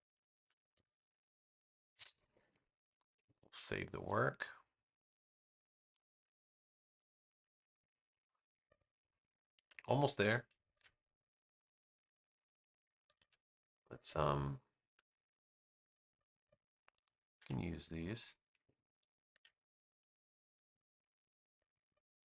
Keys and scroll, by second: 0.4 super+g, 3.0 super+s, 7.8 space, 10.6 super+v, 13.1 super+z, 14.0 space, 17.3 super+c, 17.7 space, 19.2 super+v.